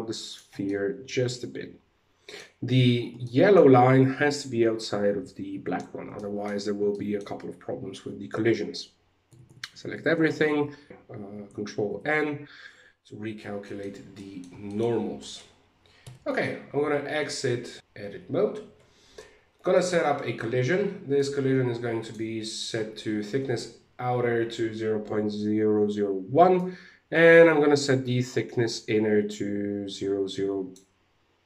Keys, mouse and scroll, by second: 0.2 middle click, 2.4-2.8 scroll up 3, 2.8 shift+middle click, 5.3-5.7 scroll down 4, 5.7 shift+middle click, 7.5-8.0 scroll down 1, 8.8 a, 9.0 a, 10.0 alt+n, 11.4 ctrl+n, 13.2 shift+middle click, 13.7 middle click, 14.2 shift+middle click, 14.4-14.8 scroll down 2, 14.7 middle click, 15.6 Tab, 15.9 middle click, 17.8-18.6 scroll up 1, 19.3 click, 20.7 click, 26.1 click.